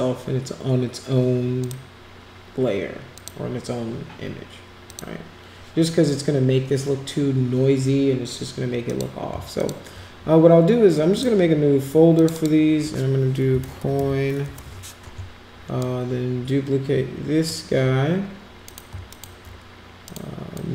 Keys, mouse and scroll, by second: 1.6 click, 3.2 click, 4.9 click, 8.8 click, 9.6 shift+click, 11.1 click, 12.2 click, 12.3 click, 13.5 c, 14.5 Return, 15.8-17.5 drag, 18.6 click, 19.1 shift+click, 20.0 click, 20.5-20.7 drag.